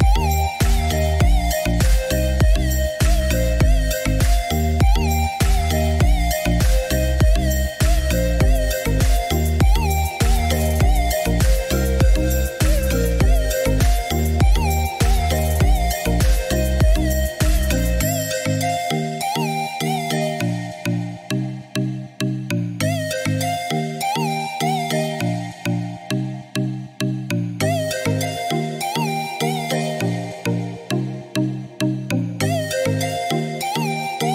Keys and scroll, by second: 8.9 9, 9.6 Return, 15.9 6, 16.3 Return, 17.7 Escape.